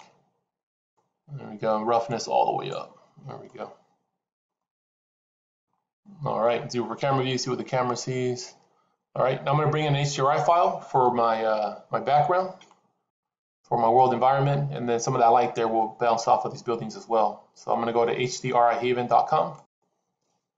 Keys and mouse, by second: 1.9 click, 3.3-4.3 middle drag, 4.5-5.5 middle drag, 5.9-6.4 middle drag, 6.9 KP_0.